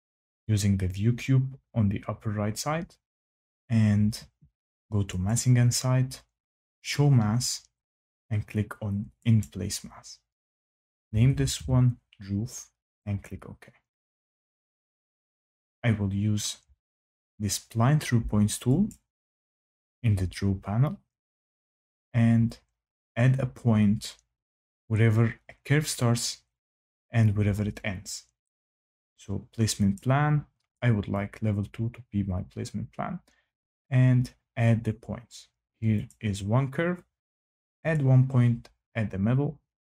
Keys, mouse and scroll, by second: 5.2 click, 6.8 click, 9.3 click, 10.8-12.0 typing, 13.2 click, 18.8 click, 29.9 click, 31.1 click, 33.7 click, 36.0 click, 37.9 click.